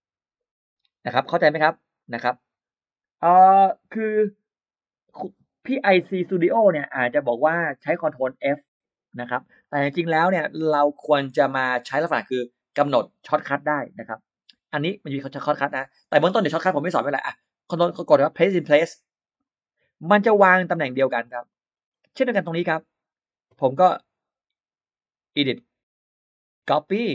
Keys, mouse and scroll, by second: 19.1 click, 20.3-20.6 scroll down 1, 20.6 middle click, 21.3 click, 22.5 click, 25.2 click, 26.5 click.